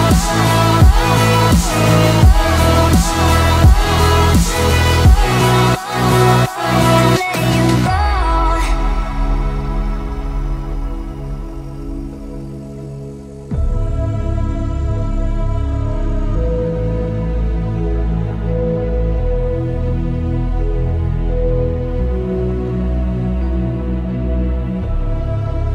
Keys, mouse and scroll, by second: 1.8-3.9 typing, 4.6 click, 6.5-8.6 typing, 9.2 click, 9.2 click, 10.0 space, 10.5 scroll up 1, 11.7 p, 12.1 click, 12.9 5, 13.4 Return, 13.7 space, 14.9 f, 15.2 click, 16.0 3, 16.4 Return, 16.8 space, 16.9 click, 18.0 p, 18.2 click, 19.1 ctrl+z, 19.5 click, 20.3 5, 20.7 Return, 21.0 space, 21.3 click, 22.3 s, 22.9 ctrl+click, 25.1 space, 25.4 middle click.